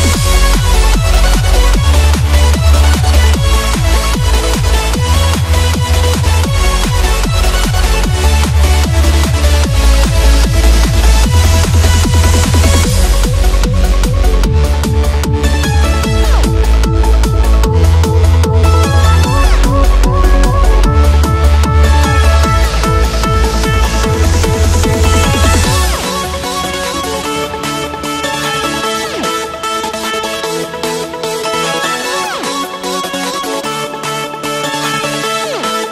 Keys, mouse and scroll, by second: 5.9 click, 7.7 right click, 8.3-12.9 drag, 21.3 click, 26.4 click, 30.7 Up, 33.7 click.